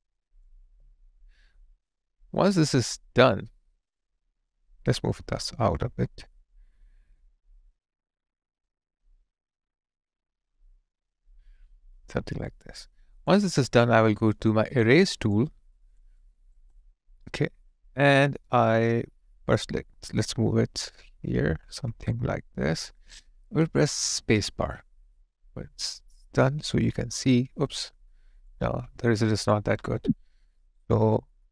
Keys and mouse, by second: 15.3 alt+click, 16.2 alt+right click, 16.7 alt+click, 24.3 space, 26.7 alt+click, 28.8 alt+click, 29.8 ctrl+z.